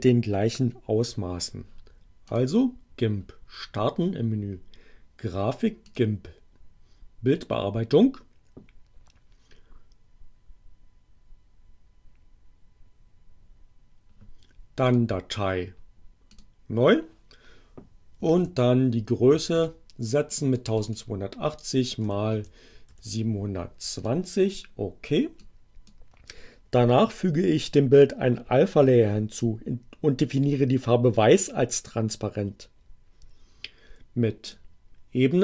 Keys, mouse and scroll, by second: 2.2 click, 5.8 click, 14.8 click, 16.3 click, 18.2-20.0 typing, 20.2 click, 21.8-23.4 typing, 24.0 click, 25.4 click, 34.4 click.